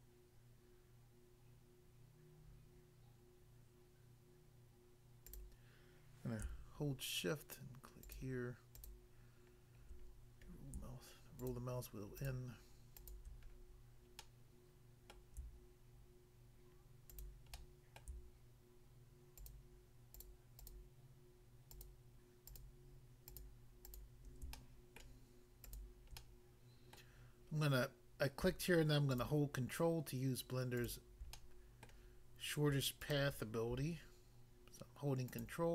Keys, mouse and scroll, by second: 5.3 click, 5.4 click, 8.0 shift+click, 8.8 shift+click, 10.0 scroll up 1, 11.4 shift+click, 12.2 shift+click, 13.0 shift+click, 13.6-14.2 scroll down 1, 14.2 middle click, 15.1 middle click, 17.1 shift+click, 17.6 middle click, 18.0 middle click, 19.4 shift+click, 19.5 shift+click, 20.2 shift+click, 20.3 shift+click, 20.6 shift+click, 21.7 shift+click, 21.8 shift+click, 22.4 shift+click, 22.6 shift+click, 23.3 shift+click, 24.5 shift+middle click, 25.6 shift+click, 25.7 shift+click, 26.2 middle click, 27.0 middle click, 29.1 ctrl+click, 29.2 ctrl+click, 30.8 ctrl+click, 30.9 ctrl+click, 31.3 middle click, 31.8 middle click, 33.1 shift+click, 35.4 ctrl+click.